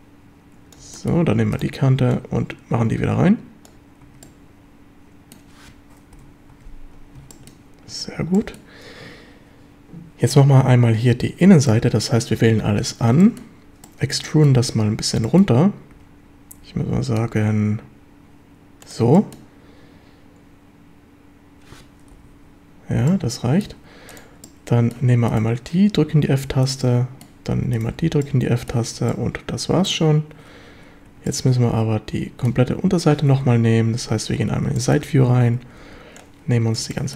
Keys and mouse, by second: 1.0 shift+middle click, 2.1-3.7 drag, 4.0 Tab, 4.2-5.4 middle drag, 6.2 KP_7, 6.5 Tab, 7.3 shift+middle click, 8.4 shift+middle drag, 11.7-12.3 middle drag, 12.4 a, 12.8 a, 13.2 shift+middle drag, 13.8-14.2 middle drag, 14.3 shift+middle drag, 15.3 middle click, 15.9 e, 18.8 click, 19.2 shift+drag, 22.2 KP_7, 23.1-23.7 drag, 24.4-24.9 drag, 26.8-27.3 middle drag, 27.8 shift+click, 28.0 f, 28.2-28.7 middle drag, 29.0 a, 29.1-29.9 middle drag, 31.1 3, 31.3-32.5 middle drag, 33.4 KP_1, 34.4 z, 34.8 shift+click, 35.3 1, 35.8 b, 36.9 shift+drag.